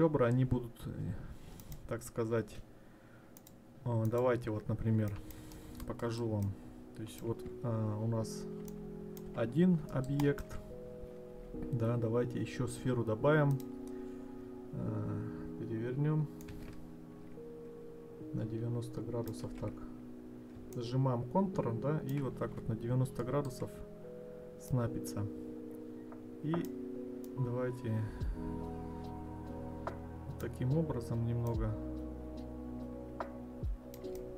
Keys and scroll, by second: 19.5 ctrl+z.